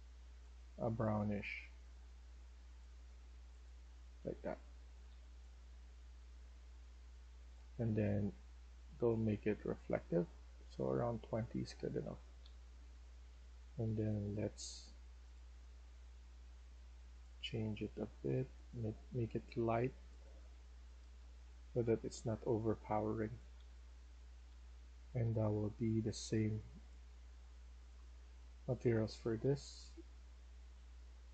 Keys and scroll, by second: 3.8-5.0 typing, 11.3-14.3 typing, 18.6-19.3 typing, 20.7-25.2 typing, 27.8-29.7 typing.